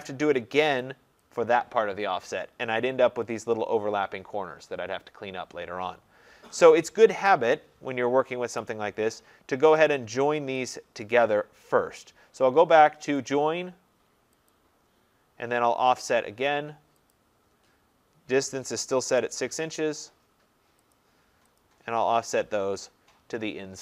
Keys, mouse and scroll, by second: 0.8 click, 1.4 click, 2.9 scroll, 6.5 scroll, 6.9 ctrl+z, 7.3 ctrl+z, 7.9 middle click, 8.0 scroll, 8.2 middle click, 8.7 Escape, 9.9 click, 10.0-10.6 scroll, 10.8 click, 13.3 click, 14.6 click, 17.2 click, 19.1 Return, 21.0 click, 21.6 click, 22.4 scroll.